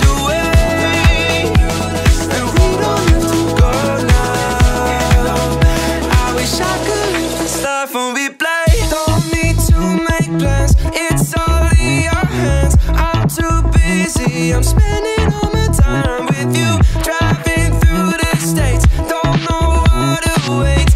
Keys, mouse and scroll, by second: 0.5 click, 1.3 click, 1.9-2.7 scroll down 1, 2.7-3.4 scroll up 1, 3.5-4.0 scroll up 1, 4.0 scroll down 1, 4.3 click, 5.0 Tab, 5.5-6.1 scroll up 2, 6.3 shift+middle click, 6.8 scroll up 1, 7.2 shift+middle click, 8.4 click, 10.5 click, 11.6 alt+click, 12.2 scroll down 1, 13.4 alt+shift+click, 14.3 ctrl+z, 14.9 alt+shift+click, 16.1-17.3 middle drag, 17.5-18.9 scroll up 2, 18.9 scroll up 1, 19.1 e, 19.7 s.